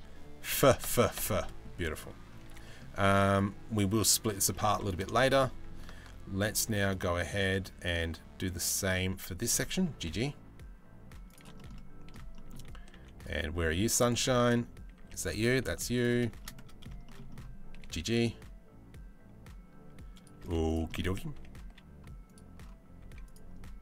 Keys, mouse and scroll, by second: 0.1 f, 0.4 f, 1.0 middle click, 1.3 z, 2.0 3, 2.2 middle click, 2.9 click, 4.1 middle click, 4.7 shift+middle click, 5.6 ctrl+r, 9.4 g, 11.1 shift+middle click, 11.3 middle click, 11.9 shift+middle click, 12.8 z, 14.5 a, 15.3 z, 16.0 shift+middle click, 16.6 shift+middle click, 17.3 g, 20.0 z, 20.5 middle click, 20.9 a, 21.2 z, 22.6 z.